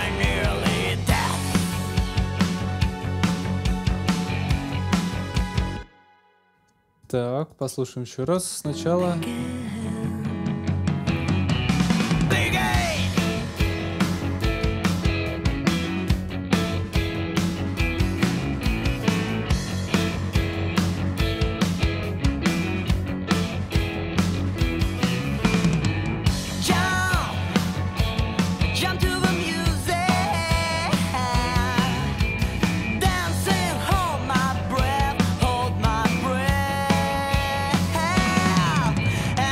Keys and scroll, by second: 5.4 space, 6.0 super+s, 8.2 space, 14.2 super+s.